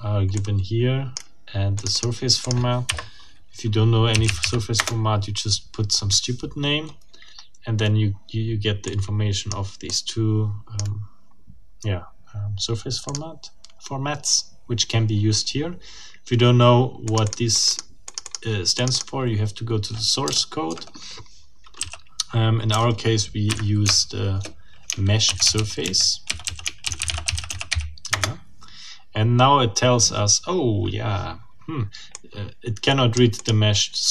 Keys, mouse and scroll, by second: 0.3 click, 1.8 click, 2.4 click, 2.9 Up, 3.9-4.7 typing, 4.8 Return, 8.9 click, 9.9 click, 13.1 click, 17.1 click, 18.1 click, 18.7 click, 21.7 c, 22.7 BackSpace, 23.5 Up, 23.9 BackSpace, 25.0-28.2 typing, 32.1 click.